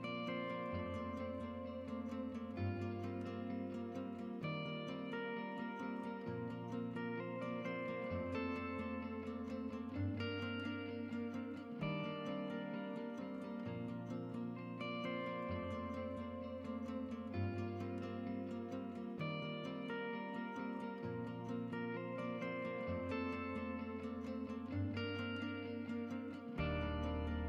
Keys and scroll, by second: 8.4-9.9 typing, 12.3-13.2 typing.